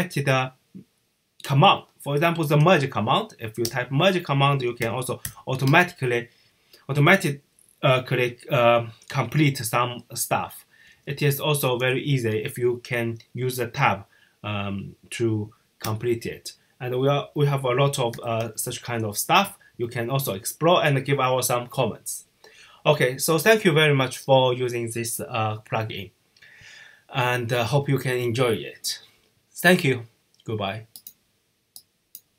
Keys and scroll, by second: 1.9-2.9 typing, 4.3-5.6 typing, 10.4-12.1 typing, 17.8-18.7 typing.